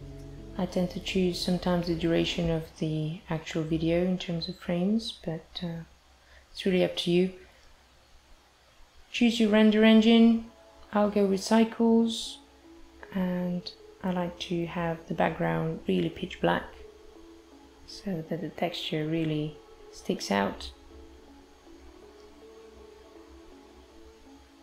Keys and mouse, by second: 3.7 click, 5.2 click, 6.9 click, 11.5 click, 12.1 click, 18.1 click, 19.1 click, 24.4 click.